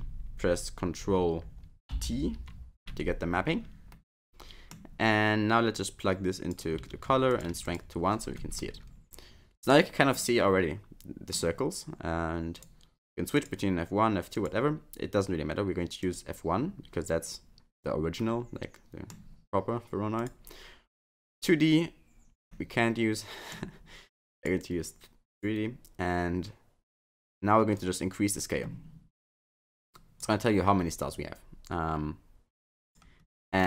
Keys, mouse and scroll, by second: 1.9 ctrl+t, 3.9 middle click, 5.7 click, 7.3 click, 8.6 middle click, 10.1 middle click, 12.5 click, 14.3 click, 18.2 middle click, 20.1 click, 22.5 middle click, 24.3 click, 27.7 click, 31.1 click, 33.5 middle click.